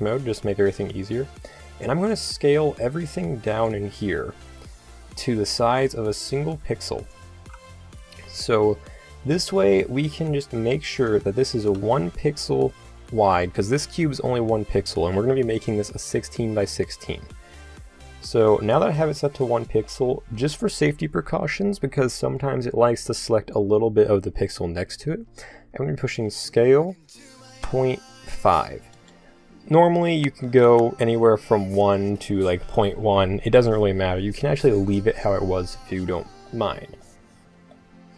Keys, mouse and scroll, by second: 4.5 s, 7.8-11.0 middle drag, 9.1 g, 11.4 shift+s, 15.3 middle click, 26.2 s.